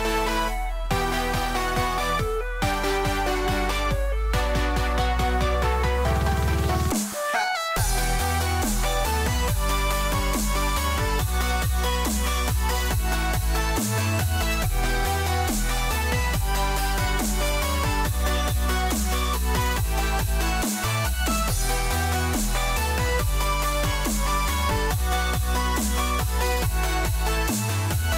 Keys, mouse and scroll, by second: 8.3 KP_Decimal, 13.8 s, 20.7-22.8 scroll down 2.